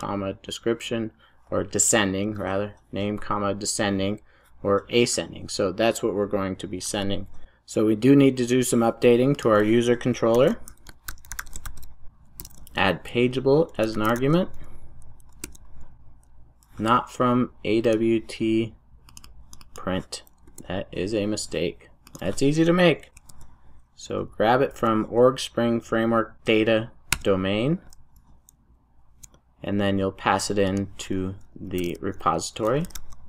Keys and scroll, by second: 10.3 ctrl+shift+super+o, 15.5 Return.